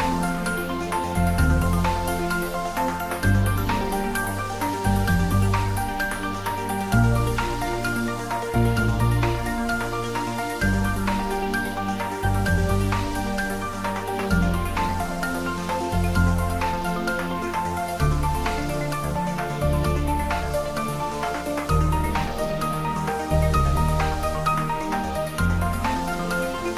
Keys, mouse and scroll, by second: 0.3 click, 1.2 shift+click, 7.3 x, 7.7 click, 11.6 shift+z, 12.5 shift+click, 14.1-14.7 scroll up 1, 17.0 click, 17.7 shift+click, 24.9 ctrl+z, 25.3 shift+click.